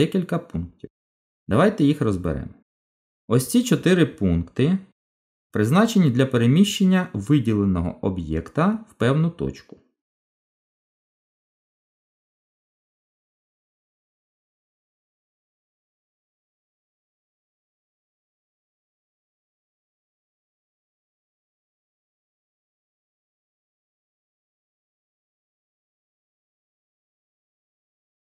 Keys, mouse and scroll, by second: 14.7 KP_7, 16.7-17.8 scroll up 4, 18.2 shift+middle click, 19.1 scroll up 2, 19.8 shift+middle click, 22.9 g.